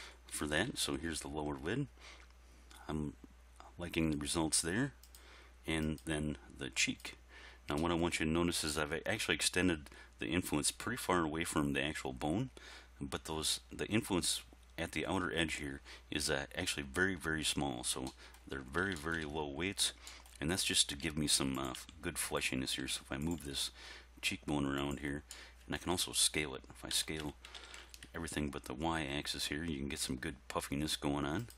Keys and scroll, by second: 0.4 r, 0.7 x, 21.0 r, 21.8 g, 27.0 s, 27.6 shift+y.